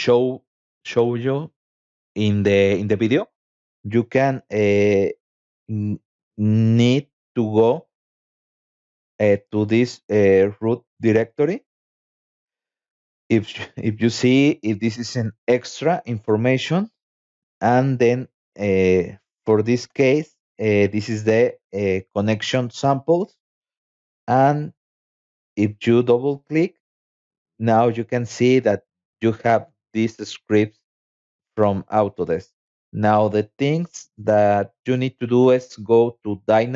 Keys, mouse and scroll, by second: 0.5 scroll down 1, 1.8 scroll down 1, 4.4 scroll down 2, 7.9 scroll down 2, 9.5 scroll down 2, 13.0-13.6 scroll down 4, 17.6 click, 18.6 click, 18.8 click, 20.2 click, 20.4 click, 23.8 click, 24.0 click, 26.0 click, 27.0 c, 27.8 click, 34.4 click.